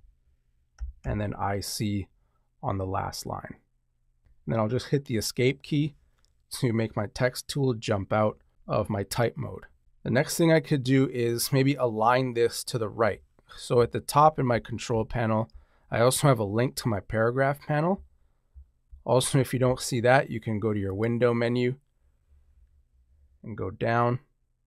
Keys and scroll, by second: 1.0 c, 4.2 super+z, 13.7 Up.